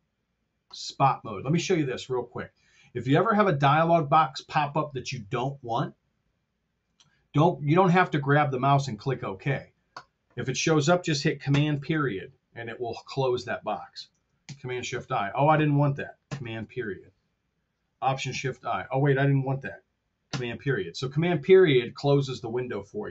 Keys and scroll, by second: 11.6 super+., 14.3 shift+super+i, 16.6 super+., 18.3 alt+shift+i, 20.4 super+..